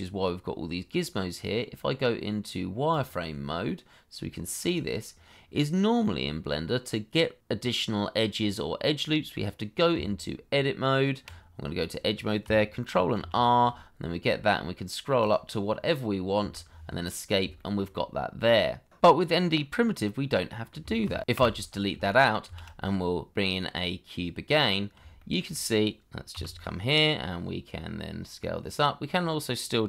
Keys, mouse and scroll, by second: 5.9 middle click, 9.9 Tab, 11.7 middle click, 13.1 ctrl+r, 14.2-15.6 scroll up 1, 16.3 Escape, 17.5 shift+middle click, 17.9 middle click, 20.4 middle click, 21.0 ctrl+z, 21.3 Delete, 22.4 shift+a, 25.1 shift+middle click, 26.3 g.